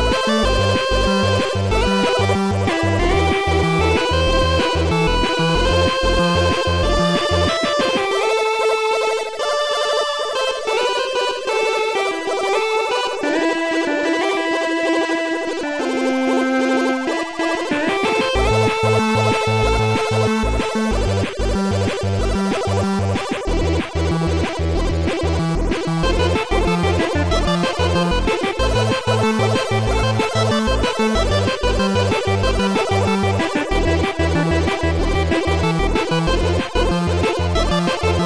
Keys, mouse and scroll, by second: 7.8 click, 16.3 click, 19.6 click, 20.9 click, 22.6 shift+click, 23.8 shift+click, 25.9 shift+click, 29.4 Delete, 29.4 shift+click, 30.0 Delete, 30.0 shift+click, 31.8 click, 32.1 Delete, 32.2 click, 34.4 shift+click, 37.7 shift+click.